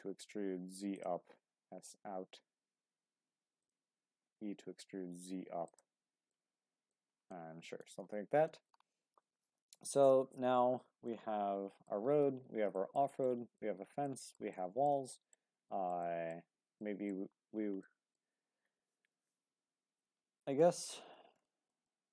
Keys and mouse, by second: 0.9 click, 1.4 s, 3.6 click, 4.1 e, 4.5 z, 5.6 click, 6.3 middle click, 7.3 middle click, 8.0 Tab, 8.5 shift+middle click, 8.9-9.9 middle drag, 11.1-11.9 middle drag, 12.8 shift+middle click, 13.2-13.6 middle drag, 14.0-14.4 shift+middle drag, 14.5-15.4 middle drag, 15.7 shift+middle drag, 16.0-16.3 middle drag, 16.8 shift+middle drag, 17.8-18.2 shift+middle drag, 21.4 shift+middle drag, 21.9-22.1 middle drag.